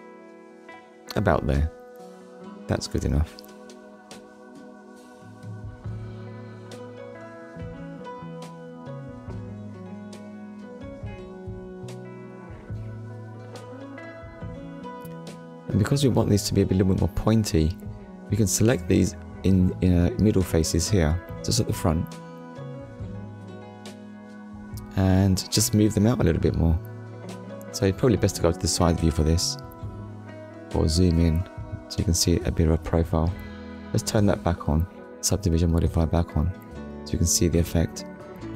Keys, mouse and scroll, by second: 1.8 click, 2.7 shift+middle click, 3.7 shift+middle click, 4.2 scroll up 1, 4.7 scroll up 1, 5.7 middle click, 6.6-7.0 scroll down 1, 7.4 click, 8.0 click, 8.4 scroll down 1, 9.0 scroll down 1, 9.7 shift+middle click, 11.2 shift+middle click, 12.3 scroll up 1, 12.9 scroll up 1, 13.6 click, 14.3 shift+click, 15.1 shift+click, 15.6 scroll down 1, 16.1 scroll down 1, 16.6 shift+middle click, 17.9 scroll up 1, 18.4 scroll up 1, 18.9 shift+click, 19.2 shift+click, 20.0 shift+click, 20.4 scroll down 1, 20.9 scroll down 1, 21.2 shift+middle click, 21.6 shift+middle click, 22.1-22.7 scroll up 2, 23.5 shift+click, 24.8 shift+click, 25.4 scroll down 1, 26.3 KP_Decimal, 27.2 shift+middle click, 29.9 click, 31.1 scroll up 1, 31.6 scroll up 1, 32.2 middle click, 35.0 click, 36.8 click.